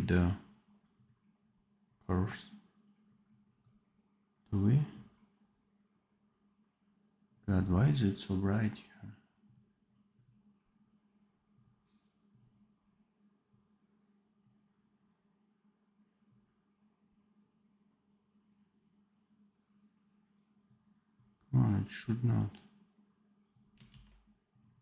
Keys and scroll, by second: 23.8 ctrl+z.